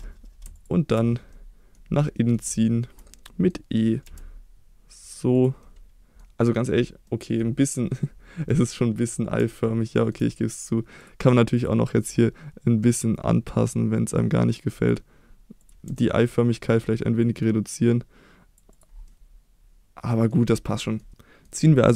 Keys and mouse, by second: 1.3 middle click, 2.1 middle click, 2.5 shift+middle click, 3.3 middle click, 4.0 e, 5.3 click, 5.6 middle click, 7.1 middle click, 9.6-10.1 shift+middle drag, 11.5-15.7 drag, 15.9 shift+middle click, 17.3-18.6 drag, 19.1-20.3 middle drag, 20.7 middle click, 21.1-21.5 middle drag.